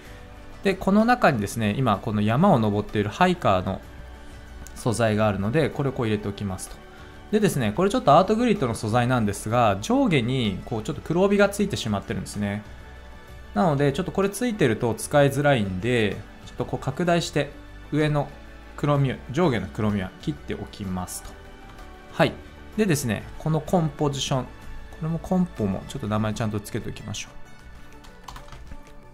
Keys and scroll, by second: 28.3 Return.